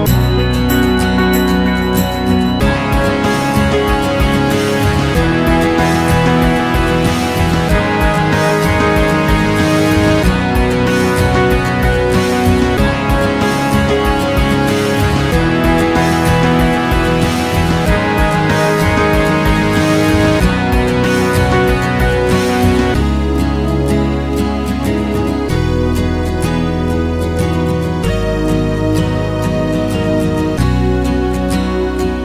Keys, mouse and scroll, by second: 5.3 alt+middle click, 5.4-6.9 alt+drag, 6.9 alt+middle click, 7.5 shift+c, 7.5 f, 8.0 ctrl+click, 8.7 ctrl+z, 8.7 ctrl+z, 9.6 right click, 10.0-15.8 ctrl+drag, 15.8 shift+c, 15.9 click, 16.4 click, 16.6 ctrl+z, 16.7-18.5 ctrl+drag, 18.5 alt+right click, 18.6 alt+click, 18.7 alt+middle click, 18.9 alt+right click, 19.1-23.6 ctrl+drag, 23.6 alt+right click, 23.7 alt+click, 23.9 f, 24.0-32.2 drag.